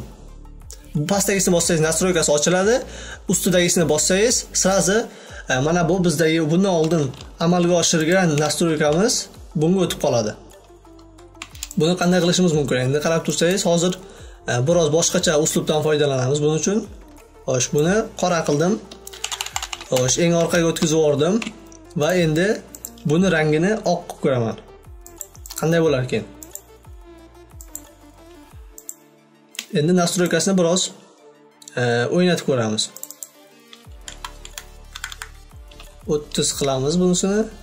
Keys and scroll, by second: 19.5 ctrl+[.